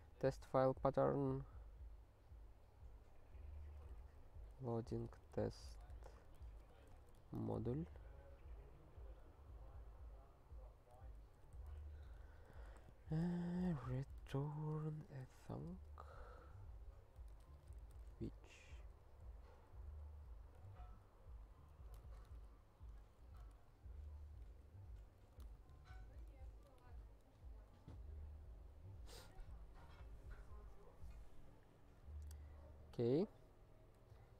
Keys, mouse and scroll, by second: 0.1 ctrl+n, 0.4 ctrl+n, 3.3 ctrl+a, 4.0 alt+f, 4.2 alt+f, 4.9-7.6 typing, 9.7 ctrl+a, 10.8 ctrl+n, 10.9 ctrl+n, 11.5 ctrl+p, 11.8 alt+f, 12.1 alt+b, 12.2-16.1 typing, 17.2-19.5 typing, 18.8 alt+f, 19.8 alt+b, 20.3 alt+l, 20.6 alt+q, 21.5 ctrl+n, 21.7 ctrl+n, 22.0 alt+^, 22.2 alt+q, 23.0 ctrl+p, 23.2 ctrl+a, 23.5 alt+;, 24.4 ctrl+/, 25.0 ctrl+n, 25.1 ctrl+n, 25.5 alt+^, 26.3 ctrl+p, 26.5 ctrl+a, 26.8 alt+q, 27.4 ctrl+/, 28.7 ctrl+n, 29.1 ctrl+n, 29.4 ctrl+s, 32.3-33.1 scroll down 3.